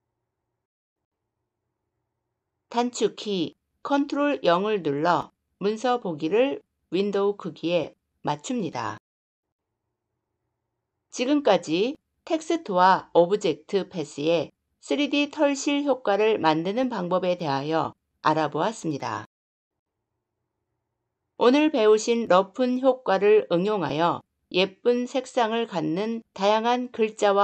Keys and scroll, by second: 3.4 ctrl+0.